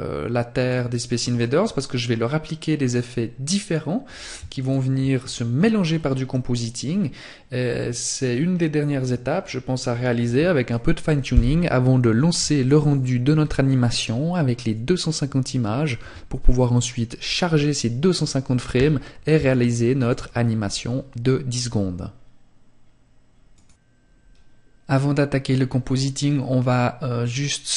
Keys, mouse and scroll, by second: 3.5 click, 26.1 click.